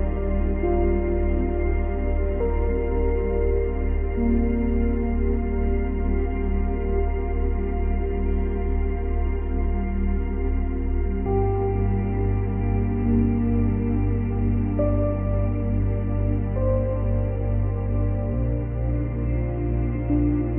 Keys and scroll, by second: 2.4 Delete, 9.4 ctrl+z, 17.6 space.